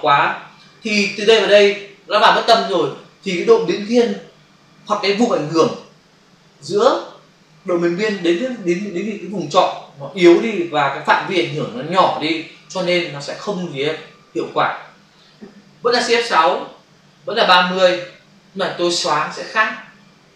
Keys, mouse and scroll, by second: 16.6 shift+F6, 17.8 Return.